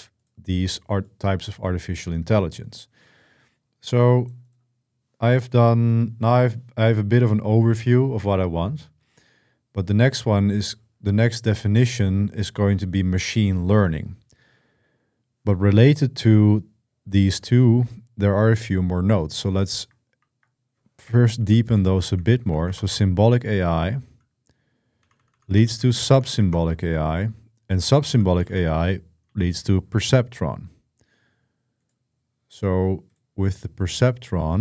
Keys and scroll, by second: 19.9 ctrl+w, 20.9-23.1 typing, 24.5-29.5 typing.